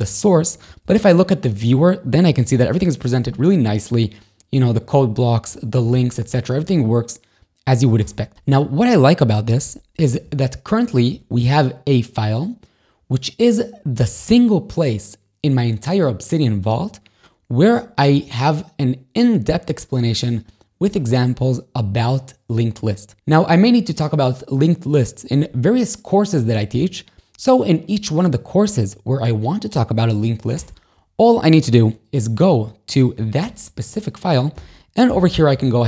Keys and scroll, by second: 0.9 super+e, 2.5 ctrl+shift+a, 3.3 r, 5.6 a, 8.1 Escape, 10.2 ctrl+shift+a, 11.2 r, 18.2 a, 30.6 Escape, 33.5 shift+super+9, 34.6 o.